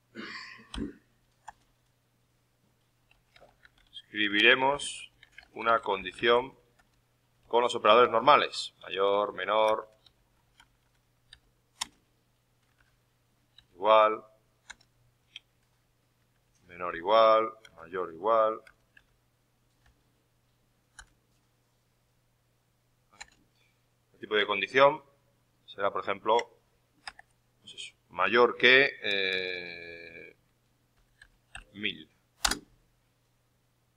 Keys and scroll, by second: 7.7 ,, 7.9 space, 12.7 shift+0, 13.5 ,, 16.2-19.7 typing, 24.3 alt+Tab, 27.0 shift+\.